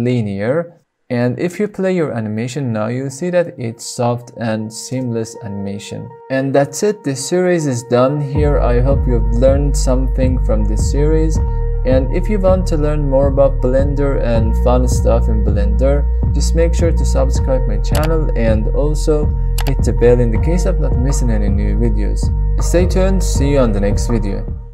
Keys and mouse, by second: 0.0 right click, 1.8 space.